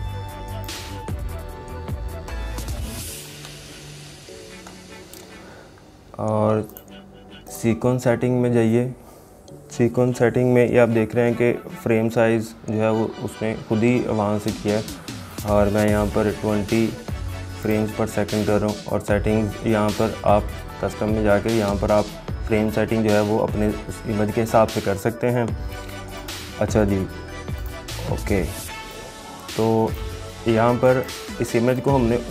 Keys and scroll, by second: 3.5 ctrl+z.